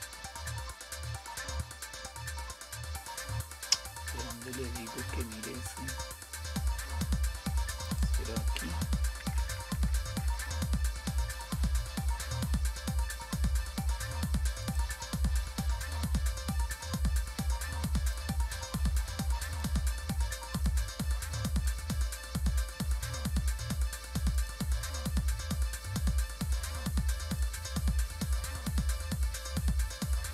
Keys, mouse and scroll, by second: 6.2-6.9 scroll down 1, 6.9-7.9 scroll down 1, 7.9 click, 9.4 BackSpace, 9.5 BackSpace, 9.7 BackSpace, 9.9 BackSpace, 14.6 click, 18.1-19.1 drag, 19.5 click, 19.5 right click, 20.6 click, 21.7 click, 24.4 click, 27.4 click.